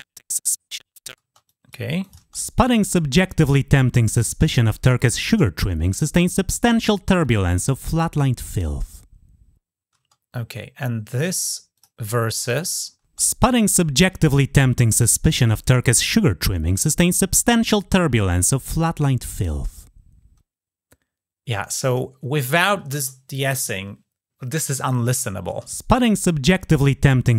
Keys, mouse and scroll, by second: 1.3 click, 1.8 click, 11.6 click, 21.7 click.